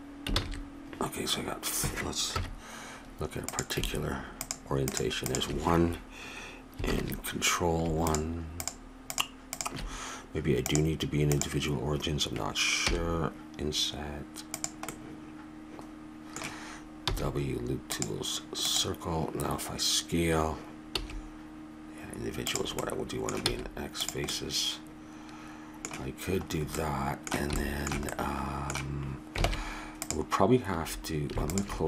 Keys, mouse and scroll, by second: 0.4 ctrl+z, 2.3 KP_1, 3.5-7.1 drag, 6.9 ctrl+KP_1, 8.0-12.8 drag, 12.8 i, 14.9 middle click, 15.4 middle click, 16.5 middle click, 17.1 w, 20.9 s, 22.8 middle click, 23.5 x, 29.4 ctrl+Tab, 31.5-31.8 drag.